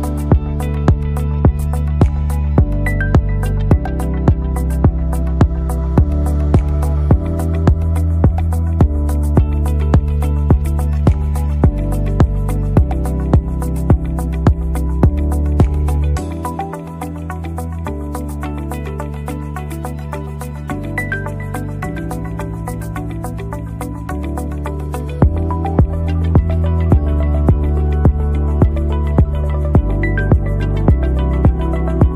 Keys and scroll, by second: 0.4 Down, 0.7 Down, 3.4 ctrl++, 10.6 ctrl+Right, 10.9 ctrl+Right, 14.1 Right, 16.9 Right, 19.5 Right, 20.4 Right, 20.6 Right, 21.0 Right, 22.1 Right, 22.7 Right, 23.5 Up, 24.4 Up, 25.6 Right, 27.4 Down, 28.1 Down, 29.3 Down, 31.7 Left, 32.1 Right.